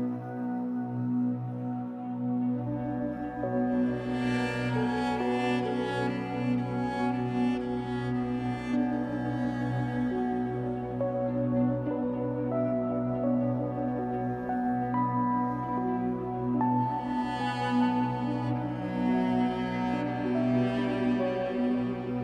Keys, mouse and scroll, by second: 1.0-1.3 scroll up 2, 2.4-3.0 scroll up 2, 3.5-3.8 scroll down 2, 5.2 l, 6.3-7.5 scroll down 4, 7.5 click, 7.8 middle click, 8.0-8.4 scroll up 2, 8.4-9.5 drag, 9.5 middle click, 10.1-10.5 scroll up 2, 10.5-13.0 drag, 13.0-15.2 middle drag, 13.7-14.5 scroll up 4, 14.5 scroll down 2, 15.2 click, 15.5 g, 16.4 right click, 16.8 scroll down 2, 16.9 click, 17.7 scroll down 1, 17.9-19.4 middle drag, 18.9-19.4 scroll up 1, 19.4 click, 20.4-21.9 middle drag, 21.5 e, 21.9 click.